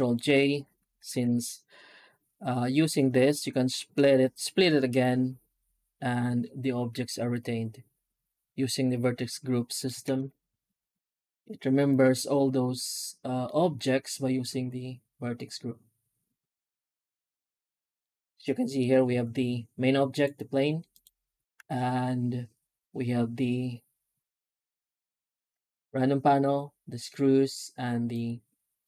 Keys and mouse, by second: 0.3 alt+shift+z, 0.6 alt+shift+z, 1.1 shift+q, 9.5 middle drag, 9.9 ctrl+space, 13.3 middle click, 17.9-18.3 middle drag, 20.0 click, 20.8 click, 28.0 click.